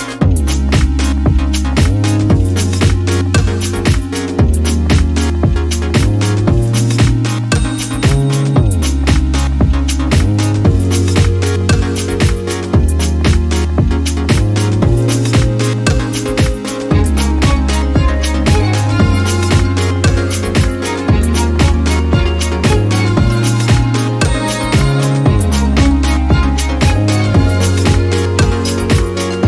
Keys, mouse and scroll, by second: 1.5 ctrl+shift+click, 2.7 shift+click, 3.9 ctrl+shift+g, 5.6 click, 5.9 click, 6.7-7.8 drag, 8.2 click, 10.0-11.4 ctrl+shift+drag, 11.7-13.0 ctrl+shift+drag, 13.2 shift+click, 14.8 click, 15.7 click, 16.7 click, 17.6 click, 18.4-18.8 ctrl+scroll up 2, 19.1 ctrl+click, 20.4 ctrl+shift+click, 21.2-22.3 ctrl+shift+drag, 22.8-28.1 ctrl+shift+drag, 29.1 shift+click.